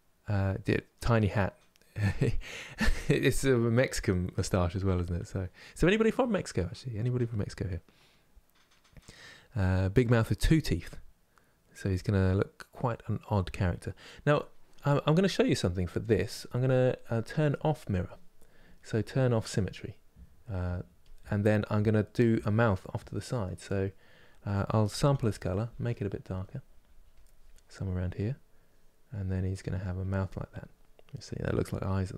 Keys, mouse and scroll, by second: 14.5-20.7 shift+middle drag, 20.7 click, 21.4-26.8 middle drag, 26.8-32.1 drag.